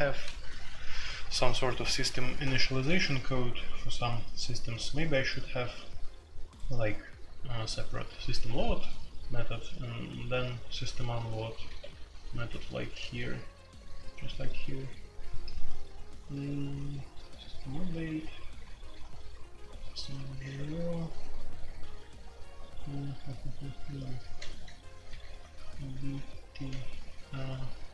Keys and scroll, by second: 3.9-4.2 typing, 11.3-13.3 typing, 16.9-19.0 typing, 21.8-22.5 typing, 24.0-25.6 typing, 26.7-27.3 k.